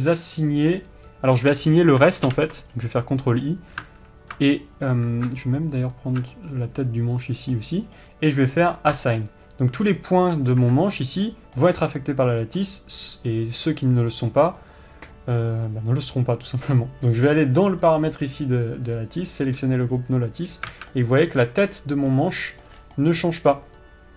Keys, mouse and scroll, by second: 2.8 ctrl+i, 3.8-6.4 scroll down 1, 6.4 alt+shift+click, 6.9-9.6 middle drag, 9.6-10.4 drag, 10.4-11.2 scroll down 1, 11.2 Tab, 11.5-11.8 scroll up 1, 11.8-12.5 middle drag, 12.5 click, 20.5 click, 21.1 scroll down 1, 21.3 alt+a, 21.5-24.1 middle drag, 22.2-22.7 scroll up 1, 23.3 scroll down 1.